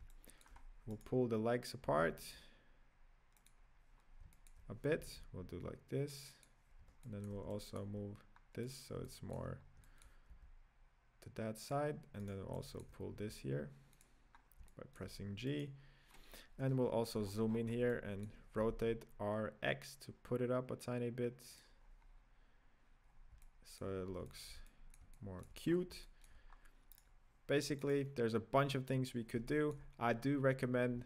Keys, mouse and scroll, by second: 0.2-1.2 shift+middle drag, 1.2 right click, 2.1 g, 4.0-4.3 scroll down 1, 4.3-5.3 shift+middle drag, 5.3 r, 7.1-8.9 shift+middle drag, 8.9 right click, 9.1-9.7 shift+middle drag, 9.7 scroll down 1, 9.9-10.6 middle drag, 10.6 g, 12.5 right drag, 12.6-13.4 middle drag, 13.4 g, 14.4 scroll up 1, 14.7-15.8 shift+middle drag, 15.8 right click, 16.7 KP_Decimal, 17.3-18.0 scroll down 11, 18.0-18.9 middle drag, 18.9 r, 21.9-23.1 scroll down 2, 23.1-23.5 scroll down 2, 23.5-24.0 middle drag, 24.0-24.3 scroll down 1, 24.3-25.8 shift+middle drag, 25.8-26.1 scroll up 4, 26.1-26.6 shift+middle drag, 26.6-27.2 scroll up 1, 27.2 right click, 28.1 right click, 29.5-30.6 shift+middle drag, 30.6-31.0 scroll up 4.